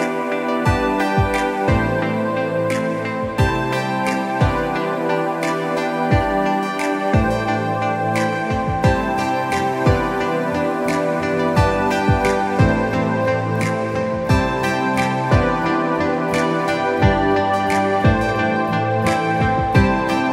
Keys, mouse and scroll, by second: 2.3 click, 11.2 click.